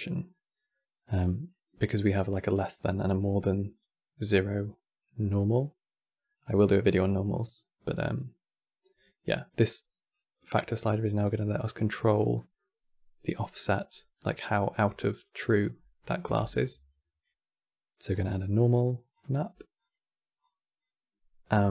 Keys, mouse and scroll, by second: 9.8-12.1 drag, 12.1-13.0 middle drag, 13.0 click, 13.6 scroll down 2, 13.9-14.6 middle drag, 14.6 click, 15.5-16.1 middle drag, 16.1 shift+a, 20.1-21.3 drag.